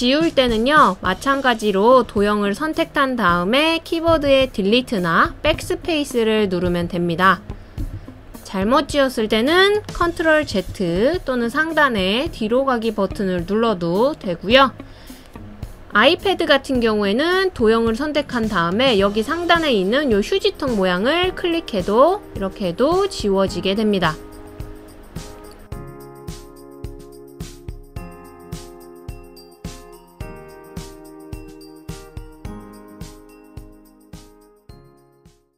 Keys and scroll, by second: 5.4 BackSpace, 6.8 BackSpace, 8.0 BackSpace, 9.1 BackSpace, 11.8 super+z.